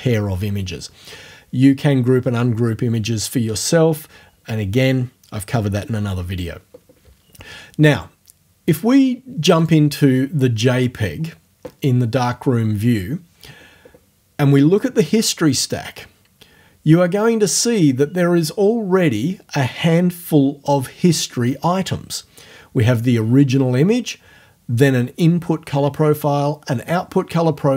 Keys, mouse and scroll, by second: 9.4 click.